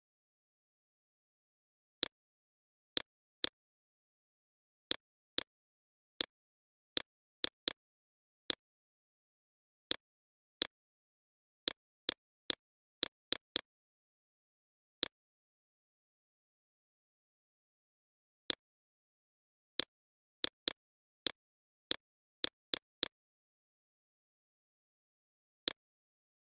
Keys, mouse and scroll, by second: 0.3 click, 1.1 right click, 1.5 click, 2.3 right click, 2.9 click, 3.6 right click, 4.1 click, 7.2 right click, 7.6 click, 7.9 right click, 8.3-11.3 drag, 11.5 click, 12.3 click, 13.6 right click, 14.0 click, 15.8 click, 17.7 click, 18.5 right click, 19.1-20.9 drag, 21.5-22.7 drag, 23.8 click, 25.1 shift+click, 25.9 right click, 26.3 click.